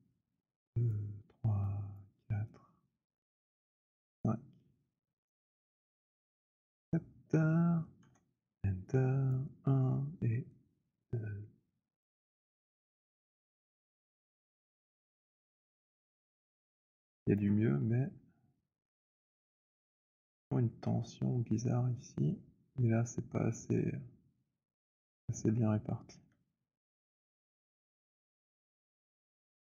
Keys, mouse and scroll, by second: 0.9 click, 2.0 click, 2.9 click, 3.7 click, 5.1 click, 6.8 click, 7.9 Return, 9.3 click, 10.9 click, 17.1 alt+click, 17.7-18.7 alt+scroll, 18.7-20.1 alt+middle click, 26.1 w, 27.3 click, 29.2 right click.